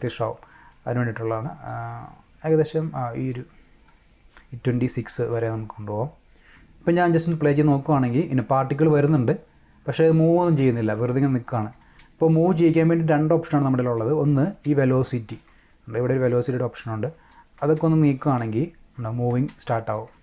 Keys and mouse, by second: 1.7-3.3 drag, 6.1 click, 6.4 space, 11.8 space, 12.2 click, 12.7 click, 14.4 space, 15.5 space, 16.3 click, 17.1 space, 17.6 space, 17.7 click, 18.2 space, 19.3 space, 19.7 click, 20.1 space.